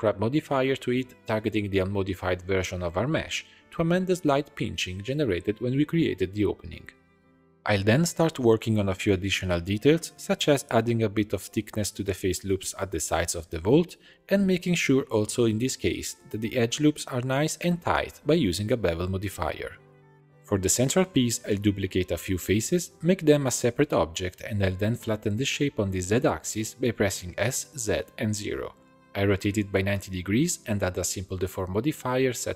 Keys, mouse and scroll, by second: 6.3-6.7 scroll up 2, 6.7 alt+click, 7.9 shift+d, 9.0-10.2 middle drag, 10.2 click, 10.7 a, 11.0 alt+e, 13.4 click, 14.1 x, 15.1 Tab, 15.4-18.1 drag, 18.9-20.3 shift+drag, 20.3 3, 20.8 click, 21.4 shift+click, 21.8 shift+click, 22.2-22.5 scroll down 1, 22.5 shift+d, 23.6 p, 24.2-25.4 drag, 25.4 middle click, 25.9 Tab, 26.1 a, 26.7 g, 27.5 s, 28.7 r, 30.3 Tab, 31.7-32.5 drag.